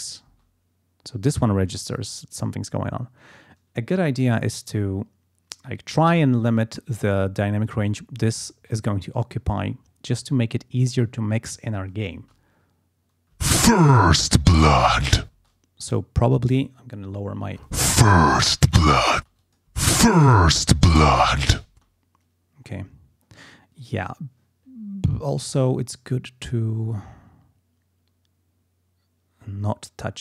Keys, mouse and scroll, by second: 0.2 space, 7.3-9.5 scroll down 6, 9.8-10.4 scroll down 4, 10.6 scroll up 2, 12.1 space, 13.3 space, 15.3 space, 19.1 space, 19.4 click, 21.7 space.